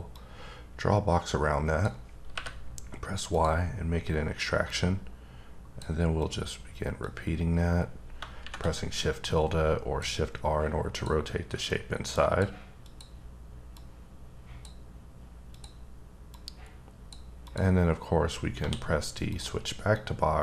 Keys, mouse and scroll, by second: 0.1 click, 2.3 y, 3.3 click, 4.6 click, 6.2 click, 7.0 click, 10.9 click, 11.7 click, 12.8 click, 13.7 click, 15.5 click, 16.3 click, 17.4 click, 18.5 d, 19.3 click, 19.9 click.